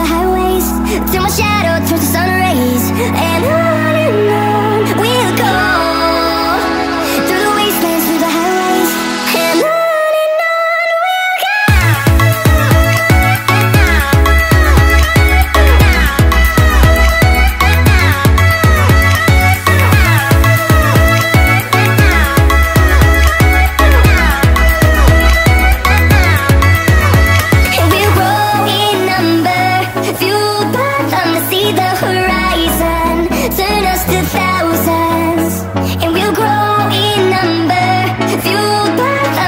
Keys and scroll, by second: 3.3-4.2 typing, 4.9 ctrl+0, 6.9 ctrl+j, 8.0 ctrl+j, 8.1 ctrl+t, 14.1-14.5 space, 14.6 z, 15.1 ctrl+t, 35.3 alt+Tab.